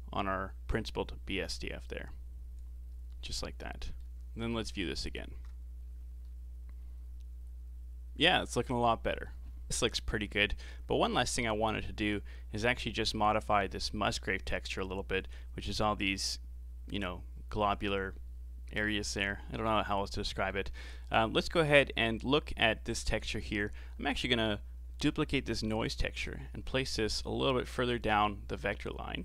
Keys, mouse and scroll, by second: 1.1 click, 3.6-5.2 middle drag, 5.2 ctrl+shift+click, 6.4-9.6 middle drag, 10.7-12.2 scroll down 1, 12.3-15.4 scroll up 1, 19.2-21.2 middle drag, 21.2-22.1 scroll up 6, 22.1-23.2 middle drag, 23.2-24.6 scroll up 2, 24.6 click, 26.5 shift+d.